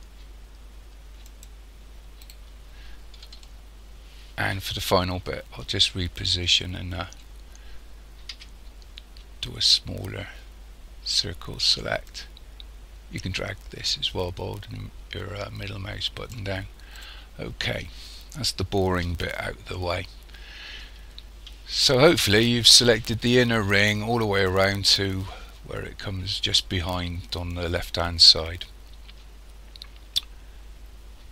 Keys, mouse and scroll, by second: 2.3 right click, 3.4 shift+middle click, 6.1-6.9 scroll up 5, 7.3-8.3 scroll down 1, 8.3 c, 17.0 right click, 17.4 scroll down 1, 19.8 shift+middle click.